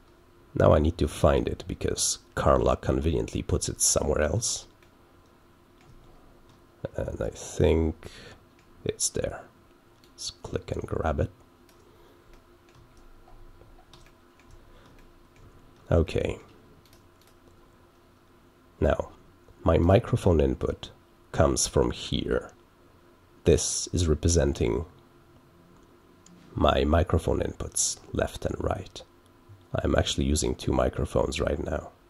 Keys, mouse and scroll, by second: 3.9 click, 4.0 scroll down 2, 4.1 click, 5.8 middle click, 6.0 ctrl+scroll down 2, 8.5 middle click, 9.9-11.7 drag, 12.3 middle click, 12.8-13.8 ctrl+scroll up 6, 14.4 middle click, 14.5 ctrl+scroll up 2, 15.3 middle click, 15.5 ctrl+scroll up 2, 16.3 middle click, 16.8 click, 17.1 click, 19.7 click.